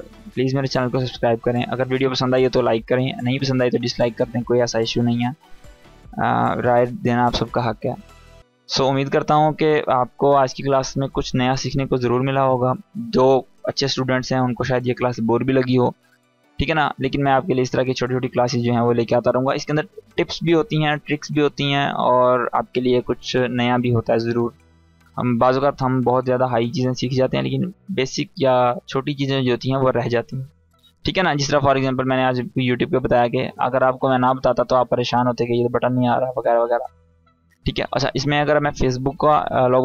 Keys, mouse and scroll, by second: 32.2 click, 38.5-39.5 drag.